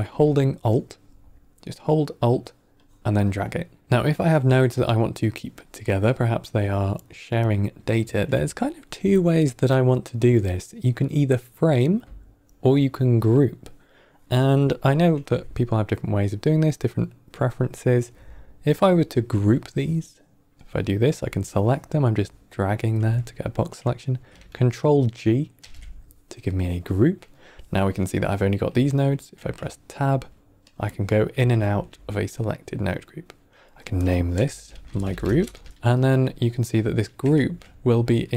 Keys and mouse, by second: 2.7 alt+click, 3.1 typing, 3.8 click, 5.6-6.1 drag, 19.5-20.5 drag, 21.4 click, 25.5 ctrl+g, 27.0-27.3 middle drag, 29.3 Tab, 30.6 click, 31.2 Tab, 31.6 Tab, 33.5-36.3 drag, 37.2 shift+a.